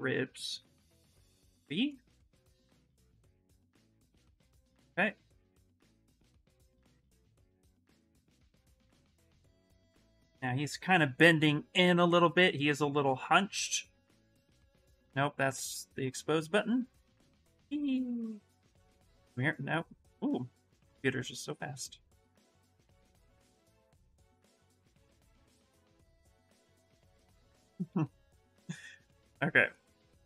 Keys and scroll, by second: 24.4 f, 27.6 f.